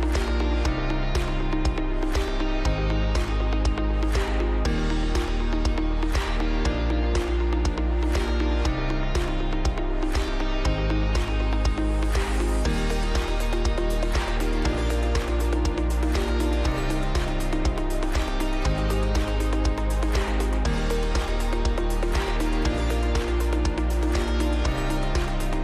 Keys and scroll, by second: 0.7 g, 4.0 space, 8.3 g, 11.6 space, 13.8 space, 19.7 space, 21.1 Escape, 25.0 Escape.